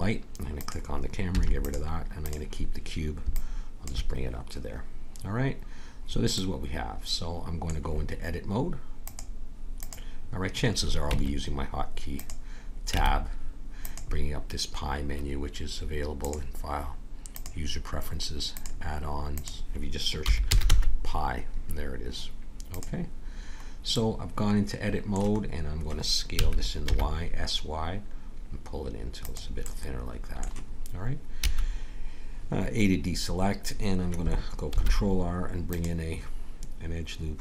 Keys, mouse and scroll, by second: 1.3 x, 5.2-6.9 middle drag, 9.0-10.8 drag, 11.0 Tab, 12.9 Tab, 16.3 click, 23.9-26.4 middle drag, 26.4 s, 31.4 a, 34.7 ctrl+r.